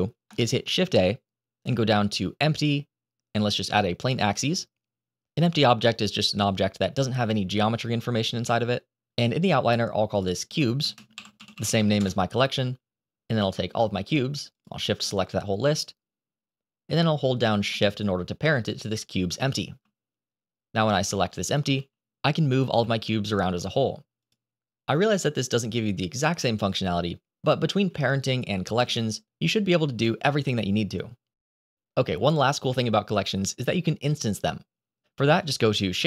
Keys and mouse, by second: 0.6 shift+a, 5.4 g, 6.5 click, 10.0 click, 10.5-11.8 shift+drag, 13.2 click, 14.4 shift+click, 15.7 click, 20.8 click, 21.6 g, 23.6 s, 28.0 ctrl+z, 28.6 ctrl+z, 29.1 ctrl+z, 29.4 ctrl+z, 29.8 ctrl+z, 33.8-34.1 middle drag, 34.4 shift+middle drag, 35.8 shift+a.